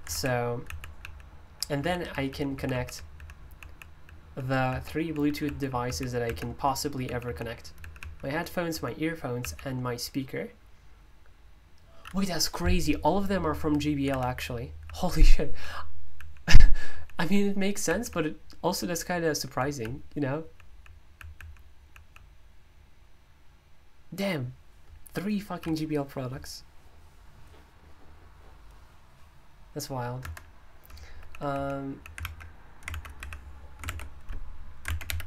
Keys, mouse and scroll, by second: 0.1 alt+j, 0.7 alt+j, 1.0 alt+k, 1.6 alt+j, 2.1 alt+k, 2.3 alt+k, 2.6 alt+j, 2.7 alt+j, 2.9 alt+k, 3.2 alt+k, 3.5 alt+j, 3.7 alt+j, 4.0 alt+k, 4.2 alt+k, 4.7 alt+j, 5.0 alt+j, 5.2 alt+k, 5.5 alt+k, 5.7 alt+j, 5.9 alt+j, 6.3 alt+k, 6.5 alt+k, 7.0 alt+j, 7.3 alt+j, 7.8 alt+k, 8.0 alt+k, 8.7 alt+j, 9.4 alt+j, 14.1 alt+k, 14.3 alt+k, 14.8 alt+j, 15.1 alt+j, 15.6 alt+k, 16.2 alt+k, 16.9 alt+j, 17.2 alt+j, 17.9 alt+k, 18.1 alt+k, 18.6 alt+j, 18.9 alt+j, 19.6 alt+k, 19.8 alt+k, 20.4 alt+j, 20.7 alt+j, 21.2 alt+k, 21.4 alt+k, 21.8 alt+j, 22.0 alt+j, 30.2 Escape, 30.9-33.2 typing, 32.9 super+l, 33.9 ctrl+u.